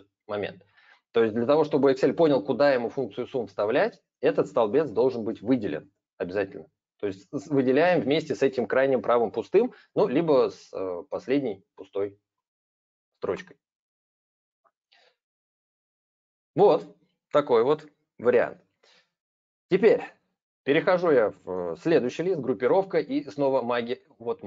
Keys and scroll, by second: 4.5 ctrl+a.